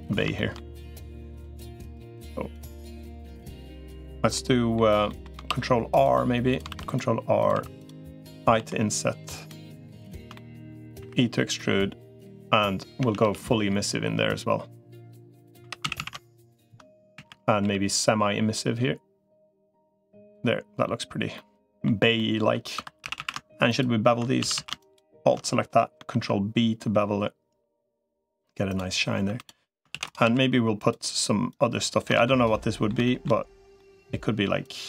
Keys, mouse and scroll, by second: 0.1 shift+middle click, 0.7 3, 1.1 click, 1.4 middle click, 2.5-3.5 drag, 4.1 middle click, 4.8 middle click, 5.3 ctrl+r, 6.5 ctrl+r, 7.5 3, 8.5 i, 9.4 middle click, 10.1 shift+middle click, 10.9 e, 12.9 a, 13.1 g, 15.5 3, 15.7 a, 16.1 alt+shift+click, 16.9 a, 17.5 g, 21.1 middle click, 21.9 middle click, 22.7 2, 22.9 a, 23.5 alt+shift+click, 24.3 a, 25.9 ctrl+b, 29.1 3, 29.7 shift+d, 30.1 s, 31.5 click, 31.9 ctrl+z, 32.3 middle click, 32.8 shift+middle click, 33.5 middle click, 34.5 click.